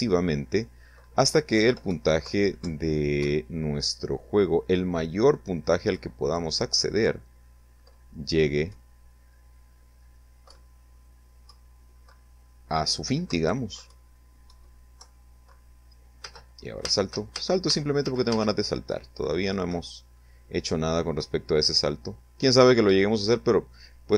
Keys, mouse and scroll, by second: 0.4 Left, 0.8 Right, 2.1 Up, 4.8 Left, 7.6 Right, 9.4 Up, 10.4 Right, 12.4 Right, 12.8 Up, 13.4 Right, 13.9 Left, 15.2 space, 17.8 Right, 20.1 Right, 21.3 Right.